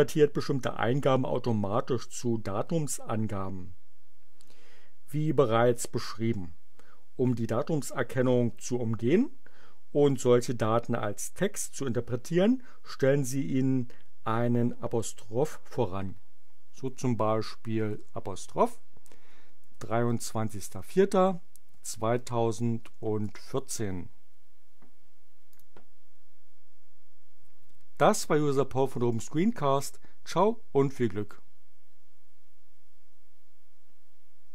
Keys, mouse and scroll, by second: 19.4-23.3 typing, 25.5 click.